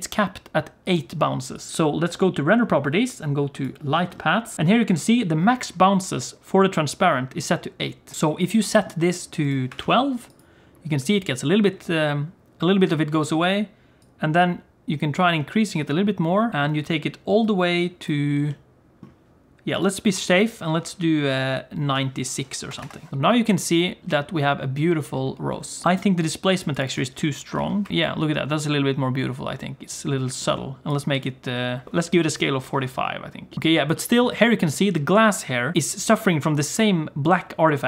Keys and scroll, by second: 21.8 9, 23.1 g, 24.0 space.